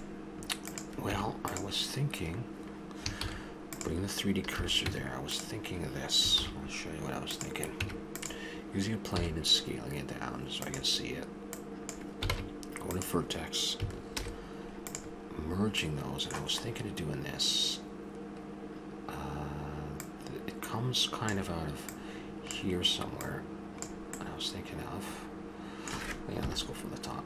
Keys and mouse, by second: 0.6 click, 1.1 Tab, 3.2 shift+s, 4.5 a, 4.9 Tab, 6.4 shift+a, 7.7 Tab, 9.1 s, 11.5 click, 12.3 ctrl+Tab, 14.2 alt+m, 15.5 middle click, 17.7-20.0 middle drag, 21.3 click, 21.9-24.7 drag, 24.7 middle click, 26.4 KP_7.